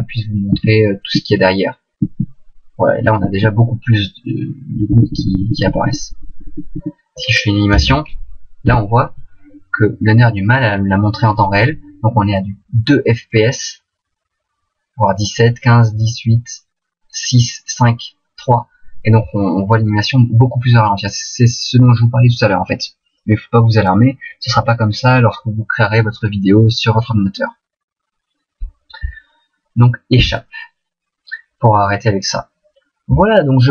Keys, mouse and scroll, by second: 0.1 Right, 0.8 Right, 1.6 Right, 2.6 Right, 4.0 Right, 5.6 Left, 6.0 Left, 6.2 Left, 6.2 Left, 6.4 Left, 6.5 Left, 6.8 Left, 7.8 alt+a, 30.7 Escape.